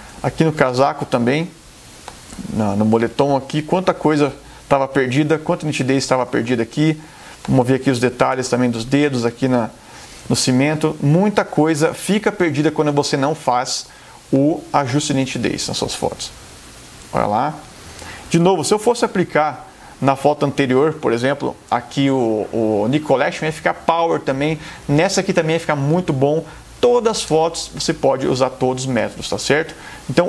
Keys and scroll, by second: 2.1 space, 6.4 space, 18.5 super+0.